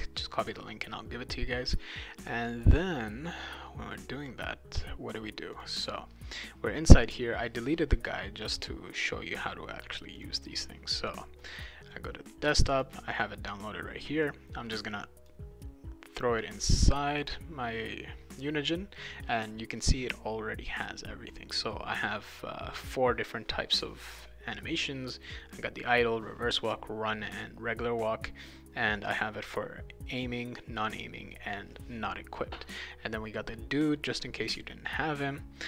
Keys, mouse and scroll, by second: 2.6 click, 5.5 click, 10.2 click, 11.4 click, 11.6 click, 12.7 click, 13.1 click, 14.2-15.3 drag, 17.2 click.